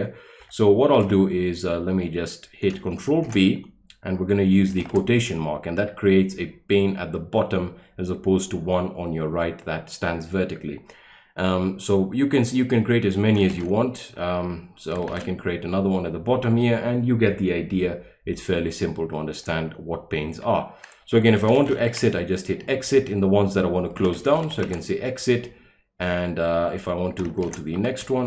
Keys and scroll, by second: 3.2 ctrl+b, 4.7 shift+', 13.5 ctrl+b, 15.0 shift+', 21.1-22.3 typing, 23.8-25.0 typing, 27.4 ctrl+b, 27.9 Left.